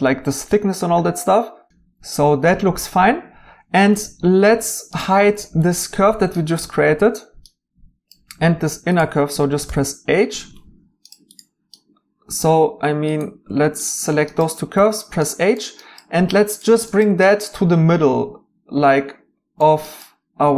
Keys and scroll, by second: 9.7 h, 14.7 h.